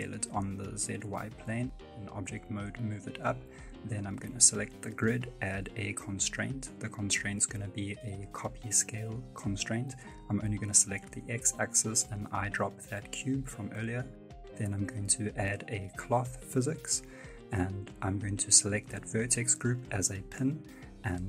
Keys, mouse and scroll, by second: 1.1 Tab, 1.7 g, 3.7 right click.